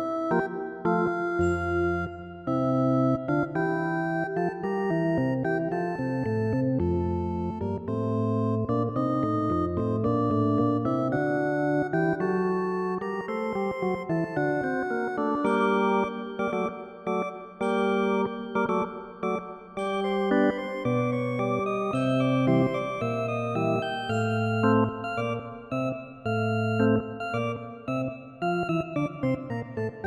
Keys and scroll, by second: 2.4 ctrl+i, 5.3 ctrl+z, 10.6 ctrl+alt+z, 13.2 ctrl+z, 22.3 ctrl+z, 24.0 ctrl+alt+z.